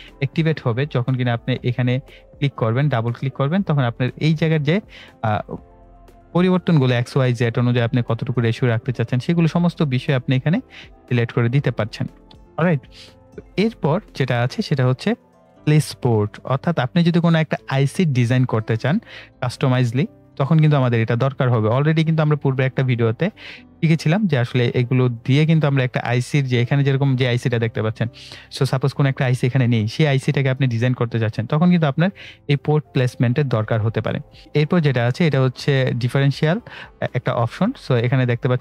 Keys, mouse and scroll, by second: 9.7 click, 28.3 click.